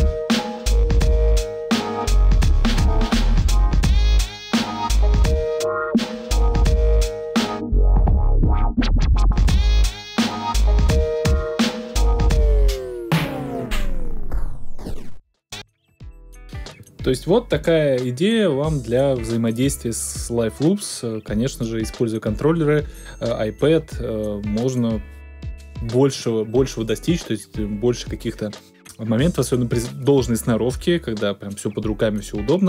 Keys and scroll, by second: 15.5 space.